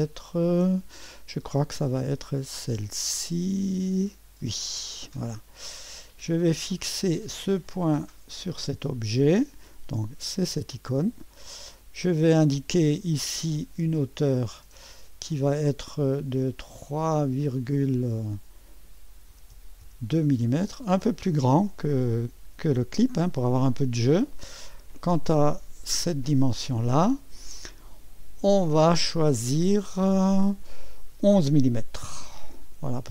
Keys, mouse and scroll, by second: 4.4 click, 6.1 right click, 7.4 click, 8.3 click, 10.5 click, 11.8-13.9 scroll up 1, 13.9 click, 17.0 click, 19.0-20.3 typing, 20.5 Return, 21.8-22.4 scroll up 1, 25.5 click, 27.8 click, 32.2 1, 32.4 1.